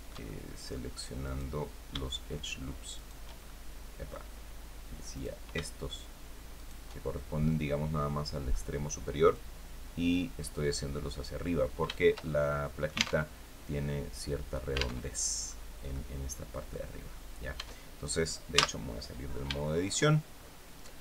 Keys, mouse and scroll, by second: 0.9 right click, 2.6 shift+right click, 3.1 shift+middle click, 4.8 right click, 6.2 shift+right click, 6.7 shift+scroll down 1, 7.0-8.3 middle drag, 9.0-11.1 drag, 11.6-12.9 shift+middle drag, 12.9 alt+Tab, 14.7 alt+Tab, 15.1-15.4 scroll up 2, 15.6 right click, 16.9 scroll down 2, 17.3 Tab, 18.2 z, 18.8 scroll down 2, 19.3 shift+right click, 20.0-20.5 shift+scroll up 3, 20.7 scroll down 2.